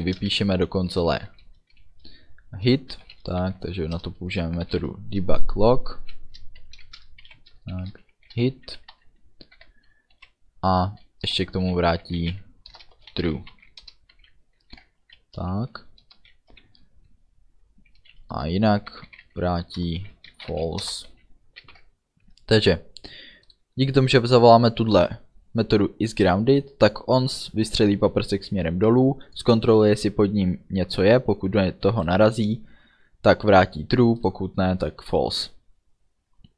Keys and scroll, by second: 0.2 shift+d, 0.4 e, 1.0 Return, 3.1 shift+l, 3.5 o, 4.0 Return, 4.7 shift+9, 6.7 shift+§, 7.3 Left, 7.8 shift+h, 8.0 i, 8.8 Right, 9.6 ů, 10.3 Down, 11.0 Up, 11.3 Return, 12.1-14.2 typing, 12.8 Return, 13.9 Return, 14.7 ctrl+s, 15.1 Down, 15.7 Return, 18.9-21.1 typing, 19.8 Return, 20.9 Return, 21.7 ctrl+s.